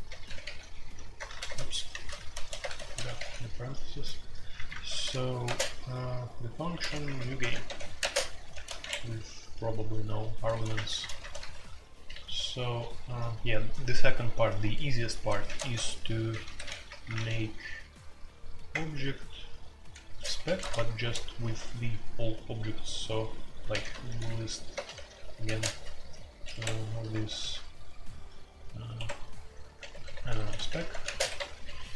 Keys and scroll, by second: 0.0-3.1 typing, 4.8-5.4 typing, 6.8-9.2 typing, 10.5-13.0 typing, 10.7 Return, 10.9 Return, 11.0 Return, 11.3 Escape, 15.4-16.9 typing, 15.7 Tab, 18.7 typing, 20.0-21.4 typing, 23.6-31.9 typing, 28.9 Escape.